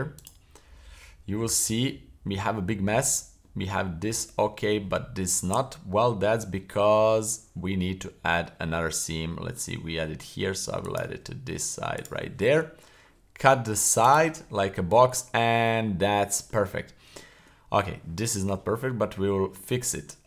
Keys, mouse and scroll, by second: 1.1-1.5 scroll down 1, 1.5-3.0 middle drag, 3.4 middle click, 4.1-4.7 middle drag, 4.9-6.1 middle drag, 6.6 middle click, 8.0 middle click, 8.7-9.5 middle drag, 8.7-9.1 scroll down 1, 10.8 right click, 11.9 shift+right click, 12.5 w, 14.6-15.2 middle drag, 15.4 scroll down 1, 15.7-16.5 middle drag, 16.7-17.1 scroll up 2, 17.2 shift+middle click, 18.7-19.3 middle drag, 19.6 middle click.